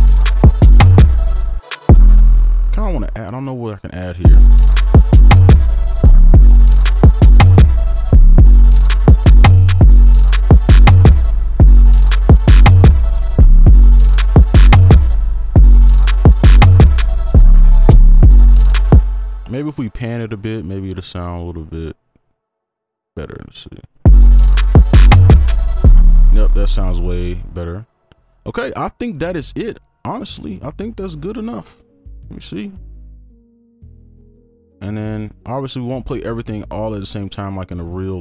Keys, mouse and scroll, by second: 1.5 space, 2.1 space, 4.2 space, 6.1 space, 6.3 space, 8.1 space, 8.3 space, 9.4 space, 9.8 space, 9.8 double click, 11.5 space, 13.4 space, 13.6 space, 15.1 space, 15.5 space, 17.9 space, 18.2 space, 19.0 space, 23.8 double click, 25.9 space, 28.4 ctrl+right click, 31.2 right click, 35.5 double click.